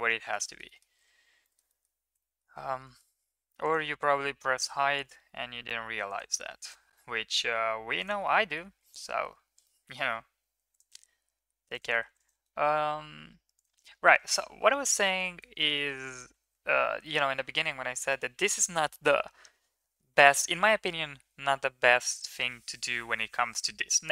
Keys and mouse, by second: 0.6 middle click, 1.6 middle click, 2.3 shift+middle click, 2.8 middle click, 3.4 ctrl+r, 6.4 ctrl+r, 8.4 middle click, 9.1 middle click, 9.6 shift+middle click, 10.6 ctrl+r, 12.0 ctrl+r, 14.7 Tab, 14.9 middle click, 15.3 ctrl+s, 15.7 shift+middle click, 16.0 middle click, 16.4 ctrl+s.